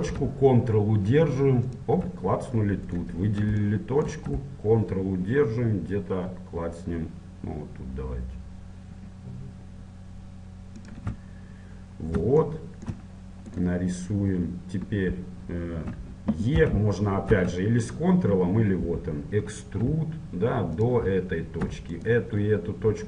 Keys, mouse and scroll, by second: 1.7-3.0 drag, 3.0 middle click, 3.6-4.7 right drag, 4.7-5.7 middle drag, 10.9-12.7 drag, 11.9 middle click, 12.7 middle click, 13.7-15.5 right drag, 16.7 e, 22.1-23.0 right drag.